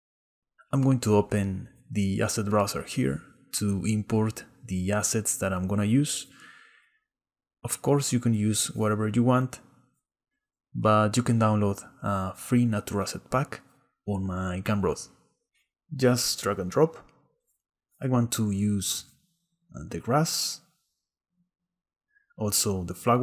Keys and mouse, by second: 1.3-5.2 drag, 6.2-7.8 drag, 15.0 click, 16.4 click.